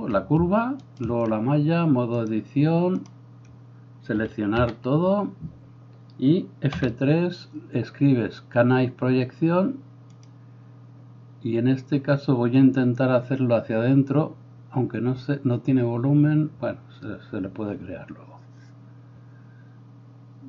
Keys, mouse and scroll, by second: 0.9 shift+right click, 1.1-2.3 shift+middle drag, 2.3-20.4 drag, 4.2 a, 4.6 a, 6.9 F3.